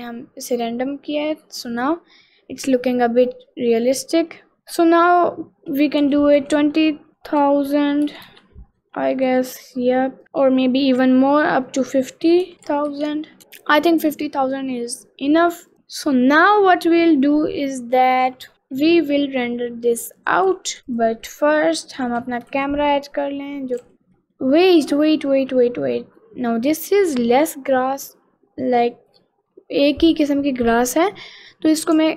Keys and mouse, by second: 0.7-1.7 middle drag, 2.0-3.4 middle drag, 3.8 middle click, 4.6 middle click, 6.0-8.4 drag, 6.5 0, 8.9 middle click, 9.9 middle click, 10.2 middle click, 11.8-13.4 drag, 12.5 0, 12.9 0, 13.5 middle click, 14.2-15.5 middle drag, 15.7 middle click, 17.0-18.2 middle drag, 19.0 middle click, 20.2 click, 20.6 s, 21.0 click, 21.4 middle click, 22.2 ctrl+z, 22.6 shift+a, 24.3 middle click, 24.8-26.5 middle drag, 26.9 middle click, 27.8 click, 31.8-32.1 drag.